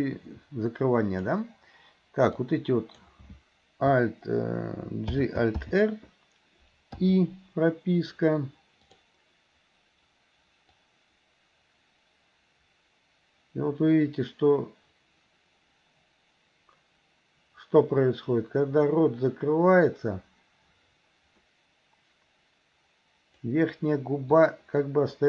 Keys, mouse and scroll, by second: 2.4 click, 5.2 alt+g, 5.7 alt+r, 7.1 i, 8.9 click, 10.9-23.6 drag, 24.5-25.2 drag.